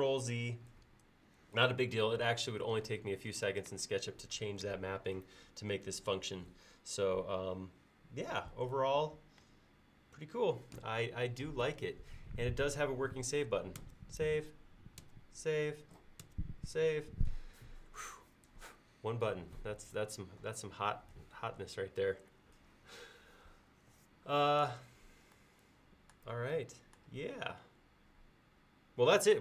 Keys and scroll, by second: 13.9 ctrl+s, 15.1 ctrl+s, 16.3 ctrl+s.